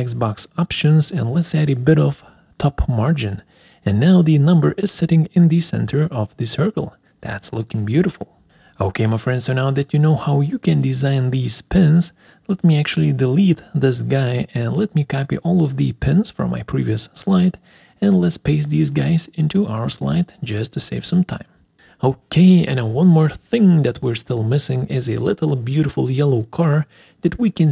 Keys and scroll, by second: 7.8 alt+3, 12.1 Delete, 14.6 BackSpace, 19.4 ctrl+c, 22.0 ctrl+v.